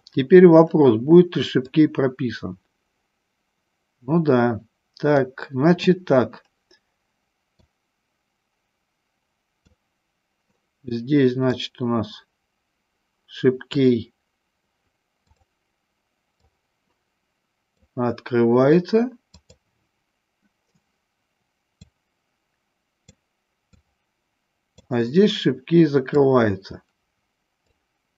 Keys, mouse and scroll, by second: 1.7-5.3 drag, 7.8-9.9 drag, 11.6-15.6 drag, 16.6-17.8 drag, 19.6 click, 22.1-23.3 drag, 24.0-25.1 drag, 26.5-27.9 drag.